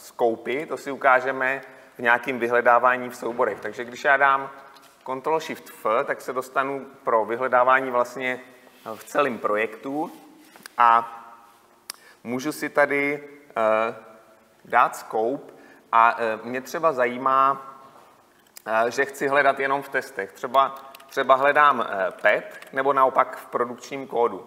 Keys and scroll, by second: 5.0 ctrl+shift+f.